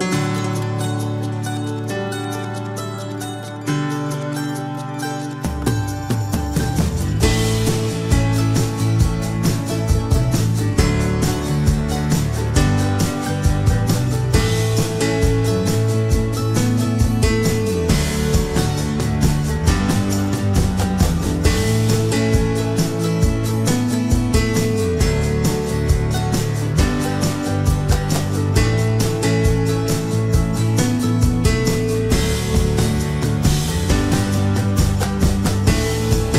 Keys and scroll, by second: 26.9 Down, 32.9 Return.